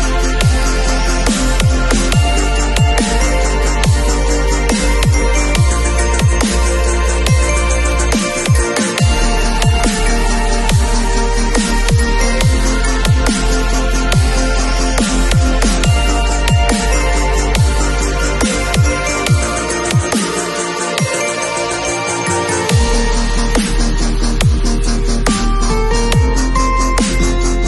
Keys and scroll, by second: 8.3 [, 11.4 [, 13.3 super+z, 14.1 super+2, 15.1 ], 20.6 [, 27.4 super+d.